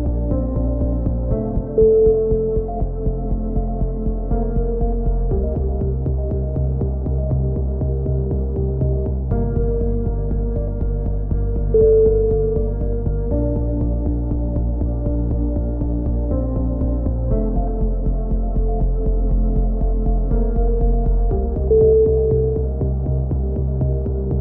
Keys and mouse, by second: 2.1 KP_7, 2.7 z, 3.8 middle click, 4.7 z, 5.1 click, 5.9 KP_3, 6.2 z, 6.9 KP_7, 8.1 z, 8.4 middle click, 8.9 click, 9.6 z, 10.2 click, 10.7 ctrl+z, 11.0 click, 13.7 z, 14.6 z, 16.3 click, 16.5-18.1 drag, 19.3 c, 20.0-21.3 drag, 22.6-23.9 drag, 24.1 a.